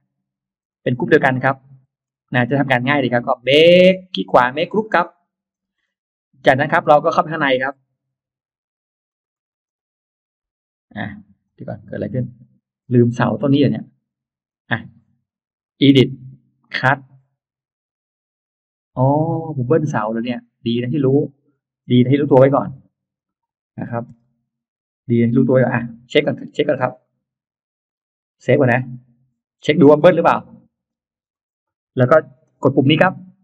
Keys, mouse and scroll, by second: 0.5 shift+click, 0.8 middle click, 1.7 shift+middle click, 2.4 shift+click, 3.4 right click, 4.8 click, 5.4 middle click, 6.4 click, 6.6 click, 7.0-7.3 scroll down 2, 8.6-9.2 scroll up 2, 9.2 Escape, 9.5 click, 10.5 scroll up 2, 10.8 click, 11.3 click, 12.2 click, 12.6-13.0 scroll down 1, 13.6 click, 14.3 click, 15.5 click, 16.5 click, 19.6 click, 19.8 click, 20.2 click, 22.3 click, 23.0 click, 24.0 click, 24.0 m, 26.0 click, 26.0 space, 26.6 scroll up 1, 26.8 middle click, 28.1 scroll up 1, 28.8 click, 31.2 click, 33.1 click.